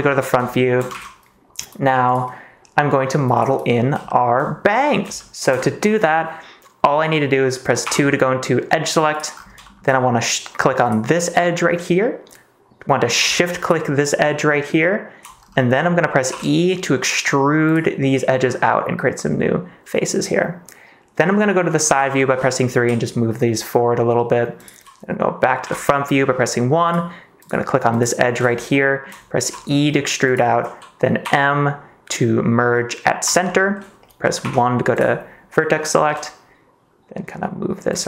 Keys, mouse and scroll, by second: 0.4 shift+middle click, 0.9 ctrl+s, 4.0 shift+middle click, 5.1 shift+middle click, 7.8 2, 9.1 click, 9.6 shift+middle click, 16.2 e, 17.6 click, 21.8 KP_3, 22.7 g, 24.5 click, 25.6 KP_1, 27.3 click, 28.7 shift+middle click, 29.3 e, 30.2 click, 31.2 m, 34.4 1, 36.0 g, 37.9 click.